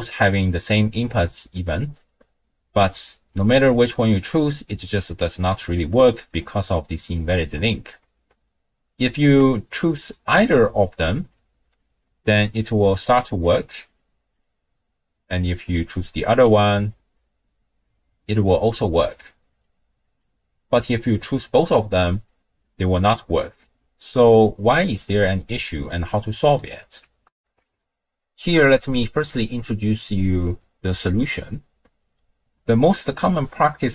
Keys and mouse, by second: 2.0-4.2 drag, 5.8-6.4 drag, 11.6 ctrl+click, 12.9-13.6 drag, 13.9-14.5 drag, 15.5-16.3 drag, 16.9 ctrl+click, 17.9-18.6 drag, 19.6-20.3 drag, 20.9 click, 22.3-23.2 drag, 27.4 ctrl+alt+shift+w, 27.4 ctrl+alt+shift+q.